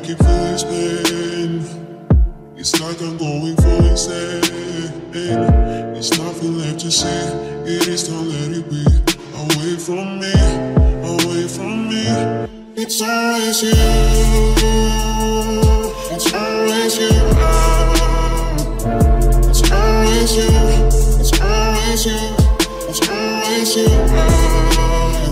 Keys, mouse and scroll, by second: 0.2 right click, 1.6-2.9 middle drag, 2.9 z, 3.5 z, 5.7 ctrl+Tab, 9.2 click, 9.2 right click, 10.7 right click, 12.4 click, 14.2 right click, 14.4 click, 15.4 k, 18.1 ctrl+Tab, 19.0 ctrl+s, 19.4-21.1 middle drag, 22.1 c, 22.5 middle click.